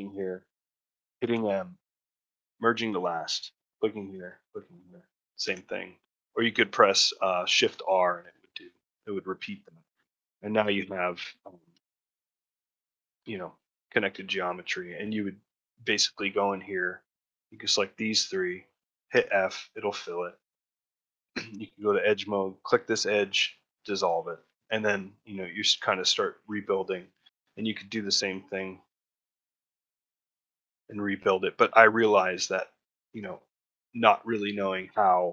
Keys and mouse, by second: 4.3 shift+click, 8.6 middle click, 9.7 ctrl+middle click, 10.4 click, 11.9 click, 11.9 g, 13.5 ctrl+middle click, 14.5 middle click, 14.9 shift+middle click, 16.5 shift+click, 17.3 shift+click, 17.7 middle click, 19.0 f, 19.4 middle click, 21.5 2, 21.8 click, 24.2 middle click, 24.4 ctrl+middle click, 24.7 middle click, 25.6 middle click, 26.5 shift+middle click, 28.1 click, 28.7 shift+click, 29.2 f, 29.6-30.9 middle drag, 31.7 middle click.